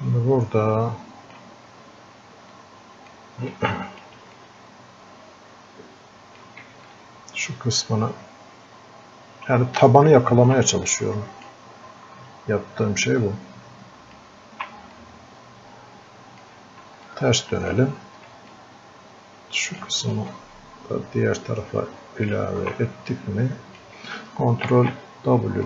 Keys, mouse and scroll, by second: 2.9 click, 4.0 alt+click, 4.7-6.6 drag, 7.2-10.4 ctrl+alt+shift+drag, 11.3 click, 13.6 ctrl+alt+shift+click, 15.3-16.6 drag, 17.2-18.6 ctrl+shift+drag, 18.6-20.2 drag, 20.2-23.1 ctrl+shift+drag, 23.1-24.7 drag, 24.7 ctrl+w.